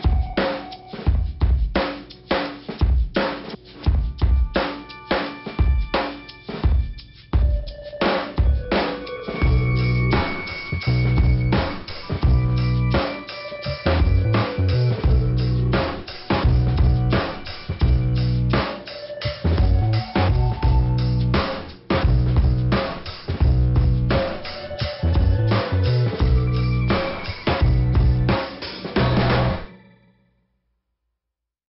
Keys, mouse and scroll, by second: 0.1 click, 0.7 l, 0.8 l, 1.0 Return, 1.2 Return, 1.4 l, 1.5 Return, 1.8 Return, 2.5 Return, 3.8 ', 5.5 click, 5.6 click, 5.8 click, 5.8 click, 10.6 click, 10.7 click, 10.8 click, 10.9 click, 11.1 click, 11.3 click, 11.5 click, 11.6 click, 11.8 click, 13.7 click, 14.6 click, 14.8 click, 16.2 click, 21.5 click, 21.8 click, 24.3 click, 24.5 click, 24.7 click, 24.8 click, 25.0 click, 27.7 click, 28.0 click, 28.3 click, 28.4 click, 28.5 click, 28.6 click, 28.8 click, 29.0 click, 29.2 click, 29.3 click, 29.5 click, 29.6 click.